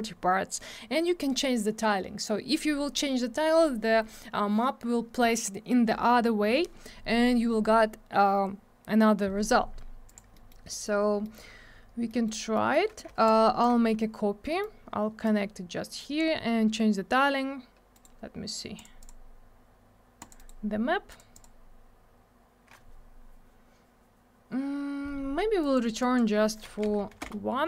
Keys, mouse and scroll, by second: 10.1 click, 10.1 click, 10.3 middle click, 10.4 middle click, 10.7 middle click, 10.8 double middle click, 10.9 scroll down 1, 11.2 middle click, 11.3 middle click, 11.4 scroll up 1, 12.0 middle click, 12.2 middle click, 12.5 middle click, 12.7 middle click, 13.2 shift+click, 14.4 middle click, 14.6 middle click, 15.2 click, 17.9 right click, 18.0 right click, 18.7 click, 18.8 click, 18.9 click, 19.0 click, 20.2 click, 20.2 click, 20.3 right click, 20.4 right click, 21.1 click, 21.1 click, 21.3 click, 21.4 click, 25.6 click, 25.7 click, 26.0 click, 26.1 click, 26.6 1, 26.8 Return, 26.9 Tab, 27.1 1, 27.2 Return.